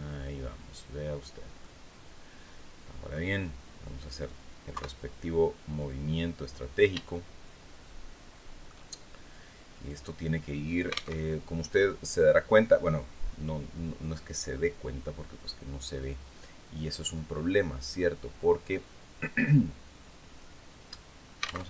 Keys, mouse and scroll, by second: 0.6-0.9 scroll down 2, 1.1-2.8 middle drag, 4.2 KP_3, 5.3 click, 6.6-8.3 shift+right drag, 9.4-10.6 drag, 10.6 alt+Tab, 19.9-20.6 scroll down 4, 21.2 alt+Tab.